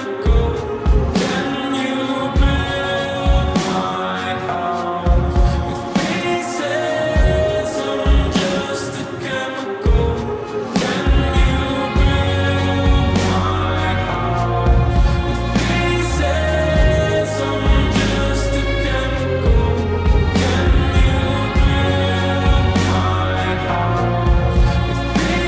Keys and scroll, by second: 2.0 `, 14.8 x, 15.3 x, 15.9 t, 20.4-23.0 typing, 24.3 x, 24.7 x.